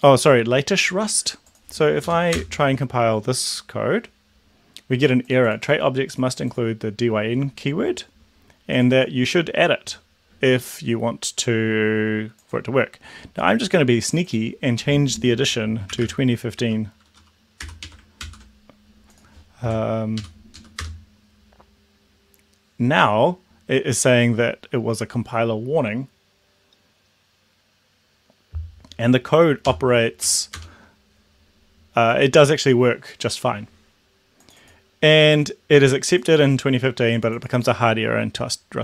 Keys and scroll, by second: 2.2 Up, 2.3 Return, 15.7-17.7 typing, 17.9 Right, 18.2 ctrl+s, 20.0 Up, 20.4 Up, 20.7 Down, 20.8 Return, 29.8 ctrl+l, 30.2 Up, 30.5 Return.